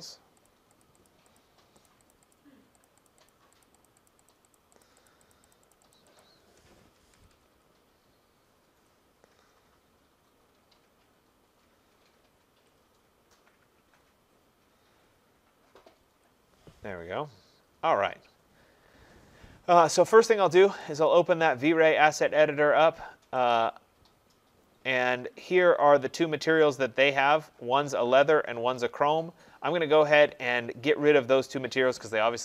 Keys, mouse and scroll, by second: 0.0 click, 0.5 click, 0.8 click, 1.1 click, 1.4 click, 1.9 click, 2.1 click, 2.3 click, 2.8 click, 3.1 click, 3.3 click, 3.6 click, 3.8 click, 4.1 click, 4.8 click, 5.1 click, 5.3 click, 5.6 click, 5.7 click, 6.0 click, 6.3 click, 7.1 Return, 7.3-8.8 Return, 9.6-12.7 Return, 14.0 Return, 14.5 Return, 14.6 Return, 14.7 Return, 14.8 Return, 15.0 Return, 15.0 Return, 15.1 Return, 15.3 Return, 15.4 Return, 15.5 Return, 15.6 Return, 15.7 Return, 15.8 Return, 15.9 Return, 16.0 Return, 16.2 Return, 20.9 click, 23.5 click.